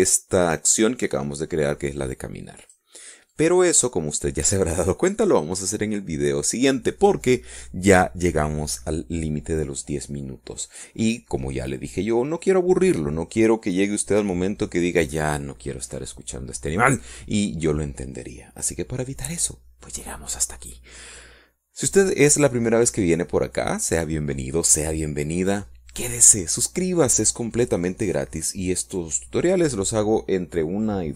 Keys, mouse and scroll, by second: 3.9 click, 4.6 click.